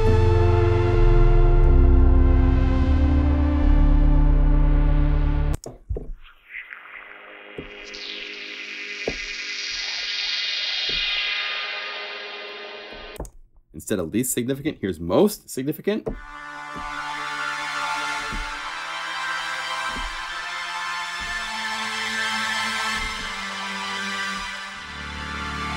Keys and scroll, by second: 0.0 F4, 10.1 F4, 16.6 F4, 18.3 F4, 19.9 F3, 23.0 F4, 24.7 F4.